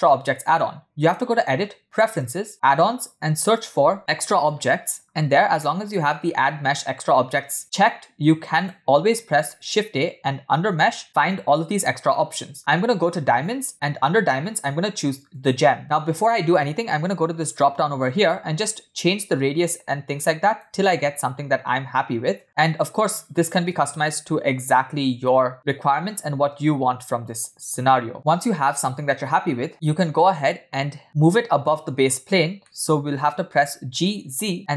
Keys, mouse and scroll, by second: 1.0-2.5 drag, 9.4 shift+a, 17.9 click, 19.8-21.4 shift+drag, 22.6-27.7 shift+drag, 29.2-29.7 drag, 32.1-32.8 scroll up 3, 32.8 middle click.